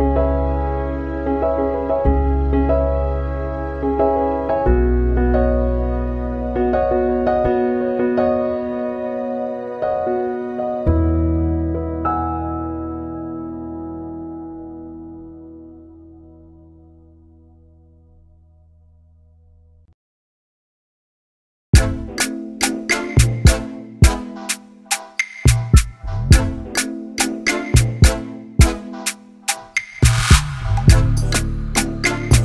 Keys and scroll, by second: 17.8 Left, 17.9 Down, 18.1 Left, 19.5 Down, 20.3 Right, 20.6 Up, 23.0 Right, 28.0 Up.